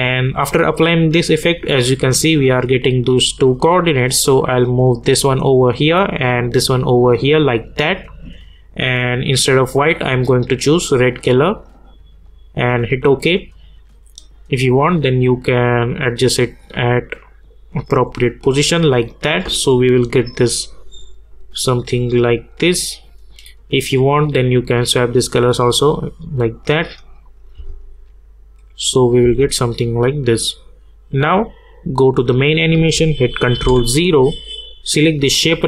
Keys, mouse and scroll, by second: 3.4-21.6 drag, 23.8 click, 27.5 space, 29.7-32.0 drag, 33.6 ctrl+0, 35.3 click.